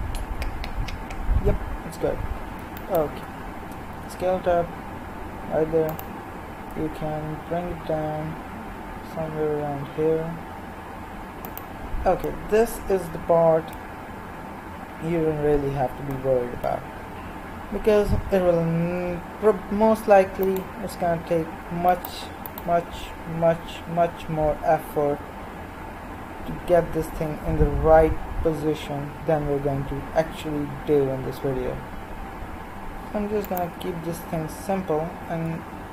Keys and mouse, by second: 3.9 s, 6.7 g, 18.8 KP_1, 20.4-25.1 drag, 21.6-23.1 l, 25.1 g, 34.7 s.